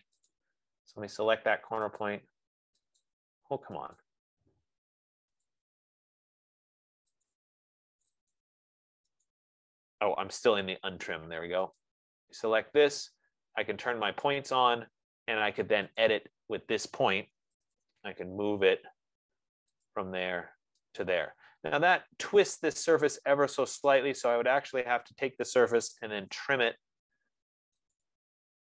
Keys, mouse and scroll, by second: 0.7 click, 2.3 click, 3.2 click, 4.5 click, 5.8 click, 7.8 click, 8.7 click, 9.5 click, 10.8 Escape, 11.2 Escape, 11.6 Escape, 12.3 click, 14.7 click, 16.5 click, 17.5-18.4 typing, 20.1 click, 21.4 click, 25.2 click, 26.1-27.3 typing, 28.4 click.